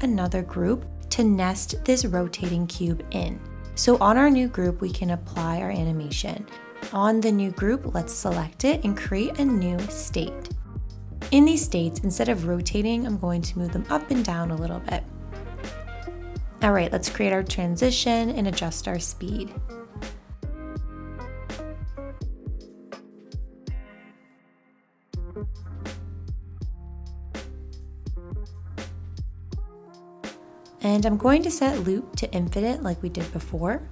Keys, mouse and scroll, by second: 31.0 5.